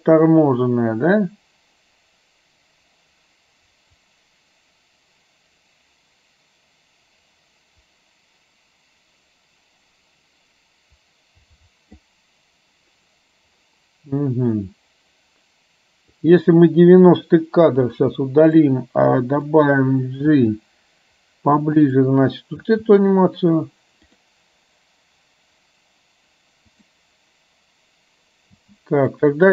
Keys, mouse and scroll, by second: 16.4 click, 17.9 Delete, 18.6-19.6 drag, 20.4 g, 22.6 space, 24.2 click, 26.9 click, 28.7 space, 29.1 click.